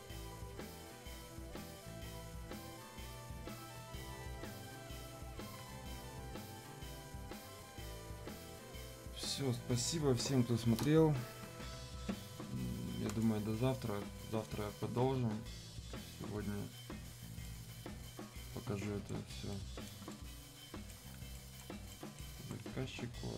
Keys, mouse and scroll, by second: 2.5 ctrl+shift+click, 2.5 ctrl+shift+1, 7.2 shift+click, 13.0 shift+click, 17.4-19.5 shift+right drag, 19.5 shift+right click, 20.1 shift+right click, 21.3-23.3 alt+right drag.